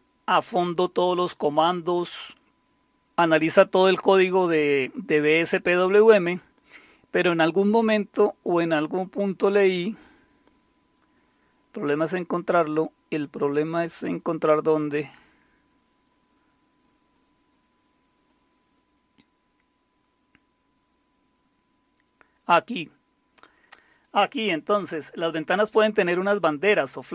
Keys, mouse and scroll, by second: 4.3-5.2 scroll down 2, 5.3-20.1 scroll down 25, 20.1-21.0 scroll up 2, 21.0-24.5 scroll down 3, 24.5-25.5 scroll down 1, 25.5-27.1 scroll down 1.